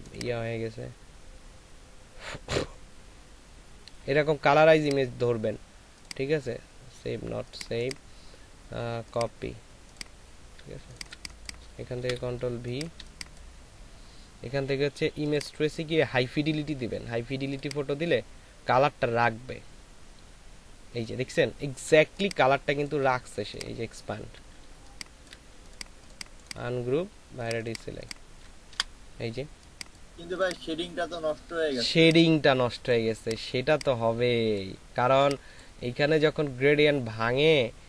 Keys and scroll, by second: 10.8 ctrl+alt+space, 12.0 ctrl+v, 12.5 space, 22.0 ctrl+space, 24.8 ctrl+alt+space, 28.7 Delete, 31.8 ctrl+space, 33.3 ctrl+space.